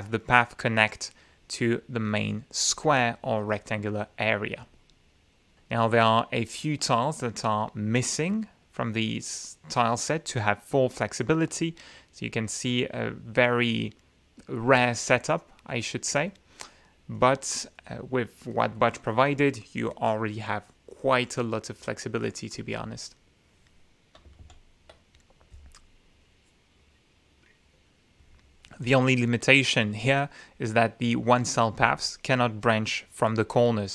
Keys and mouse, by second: 0.0 click, 3.6-4.2 drag, 4.4-5.0 middle drag, 5.5-6.5 drag, 6.9 click, 17.3 right click, 17.8 right click, 18.9 click, 20.1 click, 24.1-24.6 drag, 26.0 ctrl+z, 33.1 click.